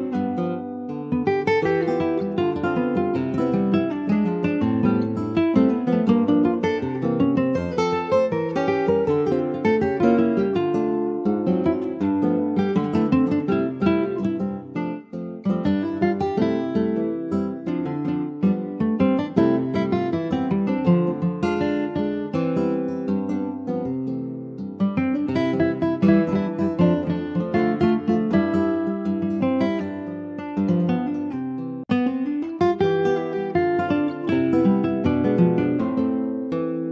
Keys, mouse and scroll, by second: 0.8 3, 1.0 click, 1.5 alt+shift+click, 2.0 alt+shift+click, 2.5 middle click, 3.0 e, 3.9 alt+s, 6.1 2, 6.4 click, 7.0 alt+shift+click, 7.6-8.6 middle drag, 8.6 ctrl+b, 12.8 Tab, 13.0 click, 13.2 scroll down 4, 13.4 middle click, 14.0 ctrl+s, 14.4 middle click, 15.2 ctrl+s, 15.7 shift+click, 15.9 shift+s, 17.2 shift+a, 19.3 scroll down 3, 21.4 ctrl+z, 22.2 ctrl+z, 22.8 shift+a, 25.8-28.9 drag, 29.6 click, 30.0 click, 30.4 alt+middle click, 31.1 s, 32.4 alt+middle click, 33.6 click, 36.1 click, 36.6-36.9 right drag.